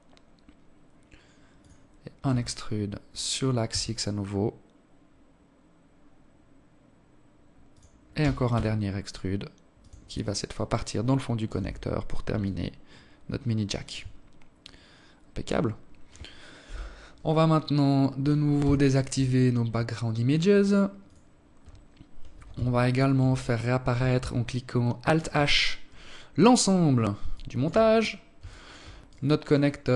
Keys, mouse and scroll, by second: 0.8 e, 6.8 e, 8.8 alt+click, 10.2 Tab, 10.4 scroll down 4, 11.0 alt+click, 12.8 scroll down 5, 13.4 scroll up 4, 13.6 scroll down 1, 15.2 KP_7, 17.4 n, 18.4-19.2 scroll down 12, 19.2 click, 19.6 click, 20.3-20.7 scroll down 2, 21.1 n, 22.0 alt+shift+click, 23.9 alt+h, 25.9 alt+shift+click, 26.4 scroll up 4, 27.0 alt+shift+click, 27.5 scroll down 1, 27.7 right click, 28.2 right click.